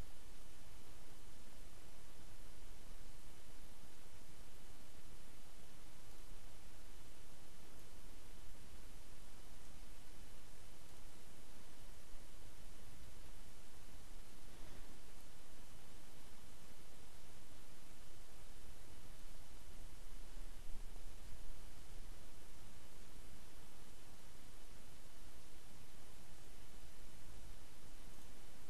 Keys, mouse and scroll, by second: 6.1-6.4 scroll up 2, 7.7-9.7 drag, 10.9 click, 15.2 click, 26.4 click.